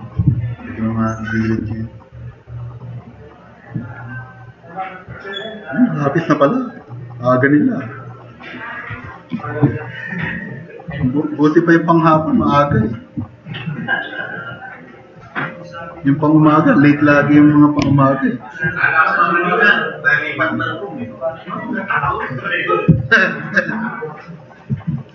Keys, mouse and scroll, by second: 9.0 Delete, 14.1 click.